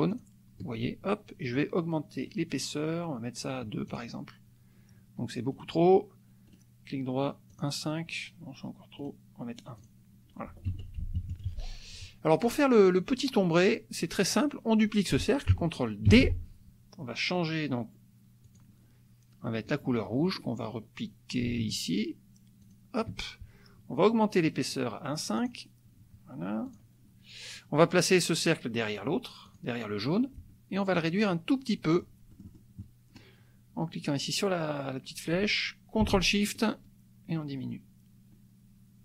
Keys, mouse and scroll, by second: 0.2 shift+click, 2.2 right click, 3.9 click, 5.7 click, 7.6 click, 9.0 click, 9.9 click, 10.7 F1, 11.0 KP_Subtract, 12.4 click, 16.1 ctrl+d, 18.5 click, 22.6 shift+click, 24.4 click, 25.4 click, 26.6 click, 29.5 click, 30.9-33.3 drag, 36.6-39.0 ctrl+shift+drag.